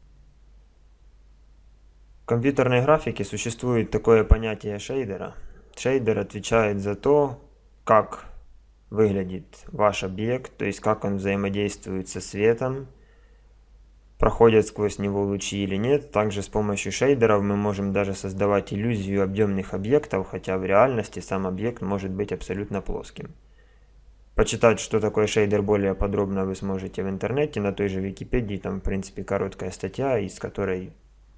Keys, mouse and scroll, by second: 0.0 Escape.